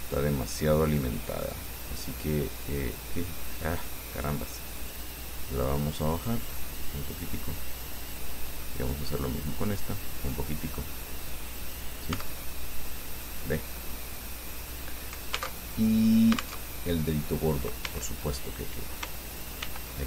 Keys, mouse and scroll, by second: 0.0 right click, 2.2 click, 4.0 click, 5.0 right click, 6.2-8.6 drag, 9.0 right click, 10.0-11.7 drag, 11.8 scroll down 2, 12.4 Tab, 13.0-15.1 drag, 15.8 alt+Tab, 16.8 alt+Tab, 17.4 click, 18.1 Tab, 19.8 ctrl+r.